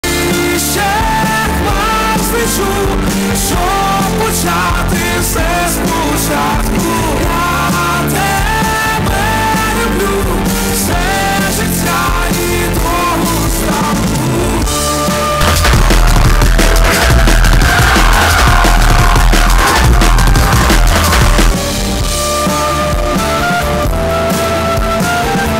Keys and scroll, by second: 0.1 ctrl+q, 2.5 n, 3.7 Down, 4.1 Down, 4.2 Return, 21.5 Page_Down.